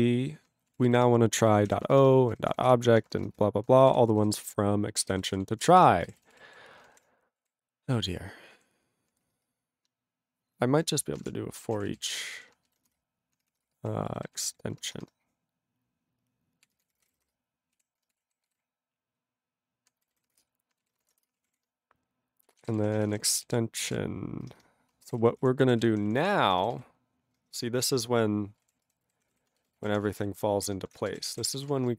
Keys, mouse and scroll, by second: 0.7 ctrl+p, 0.8 ctrl+b, 1.3-3.3 typing, 3.9 ctrl+e, 4.5 ctrl+s, 4.9-7.5 typing, 10.9-15.1 typing, 12.8 ctrl+b, 16.5-19.3 typing, 20.1 ctrl+n, 20.2 ctrl+n, 20.4 Return, 21.0 space, 21.0 {, 21.3 Return, 21.5 ctrl+a, 22.1 Tab, 22.4-24.7 typing, 23.6 alt+b, 25.1 ctrl+a, 25.2 ctrl+k, 25.4 Tab, 25.9 ctrl+s, 26.0 ctrl+p, 26.1 ctrl+p, 26.2 ctrl+p, 26.5 ctrl+n, 26.6 ctrl+n, 27.3 ctrl+n, 28.4-31.9 typing.